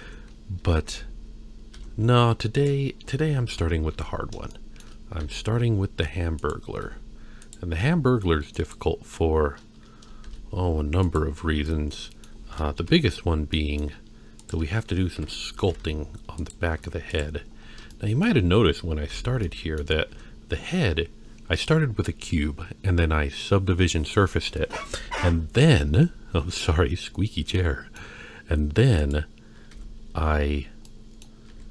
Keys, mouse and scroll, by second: 0.0 Tab, 0.9 ctrl+3, 1.8 Tab, 2.5 click, 3.5 KP_1, 4.1 scroll up 2, 4.5 shift+middle click, 5.2 e, 6.8 s, 7.8 g, 10.3 shift+e, 11.7 middle click, 12.8 KP_1, 13.6 middle click, 14.4 click, 15.1 KP_1, 15.6 g, 16.8 Tab, 17.1 click, 17.6 scroll down 1, 17.9-18.3 shift+middle drag, 19.1 ctrl+3, 19.4-19.8 middle drag, 20.1 Tab, 24.8 Tab, 27.6-28.0 middle drag, 29.0 click, 29.7 Tab, 30.9 middle click, 31.5 a.